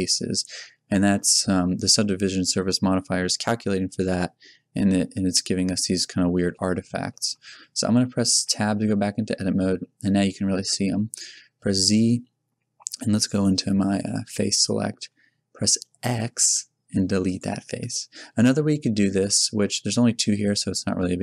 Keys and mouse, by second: 0.2 z, 4.9-6.2 middle drag, 7.7 z, 8.1 z, 8.4 Tab, 11.0 z, 13.2 click, 13.8 middle click, 14.5-15.9 middle drag, 15.9 x, 17.9 click, 18.4 z.